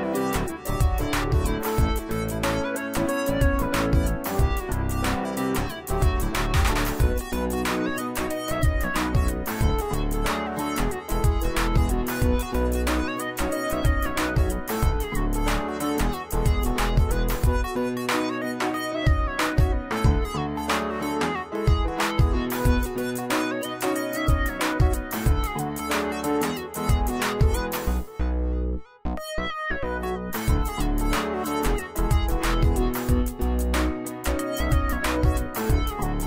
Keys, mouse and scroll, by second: 12.3 click, 16.1 click, 17.8 click, 23.0 click, 24.1 click, 26.2-31.3 drag, 32.6 click, 33.8-36.2 drag.